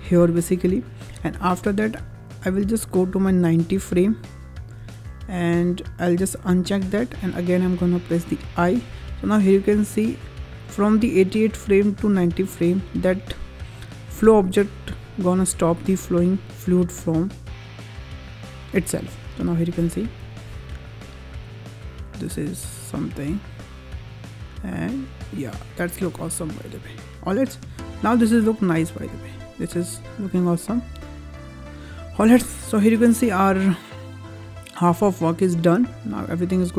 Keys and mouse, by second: 3.5-4.7 drag, 6.4 click, 8.4 i, 9.8-13.8 drag, 15.9-19.4 drag, 20.4 space, 29.9-30.6 middle drag, 32.2-32.5 middle drag, 35.5 space, 36.6 click.